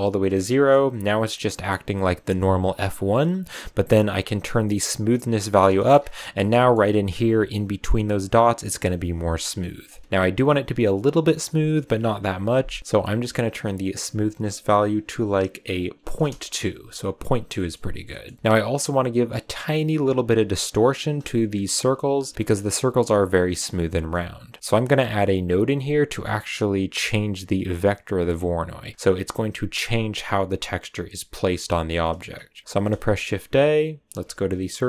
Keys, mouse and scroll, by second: 0.4-2.3 shift+middle drag, 2.3 click, 3.3-4.3 right drag, 4.3-5.7 drag, 5.7 shift+middle drag, 5.9 scroll up 5, 6.5-7.8 shift+middle drag, 7.8-10.6 drag, 13.8-16.9 drag, 17.3 scroll down 1, 17.5 middle click, 17.9 scroll down 2, 18.0-19.6 middle drag, 19.6-21.0 scroll up 2, 21.0-22.8 scroll up 2, 23.7-24.2 scroll down 2, 24.2 click, 25.2 click, 25.8 click, 27.8 click, 28.8 click, 31.4-32.0 scroll down 3, 32.0 middle click, 32.2-32.7 scroll up 3, 32.7 shift+a.